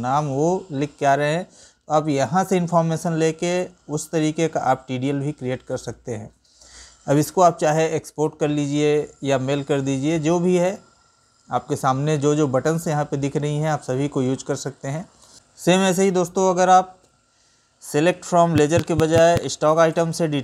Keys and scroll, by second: 2.9 Right, 15.6 ctrl+n, 16.6 Up, 17.3 Right.